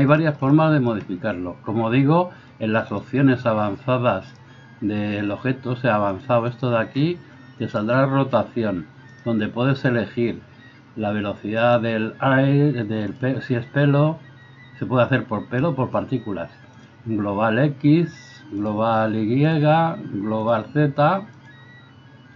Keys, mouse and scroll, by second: 3.0-6.1 middle drag, 6.1 click, 6.3 middle click, 6.6-22.3 drag.